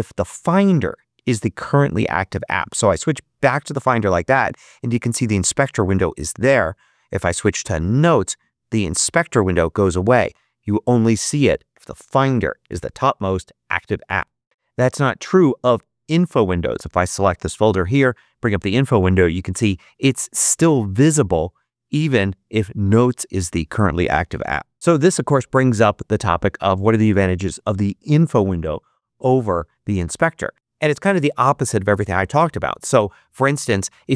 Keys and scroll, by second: 17.6 super+i.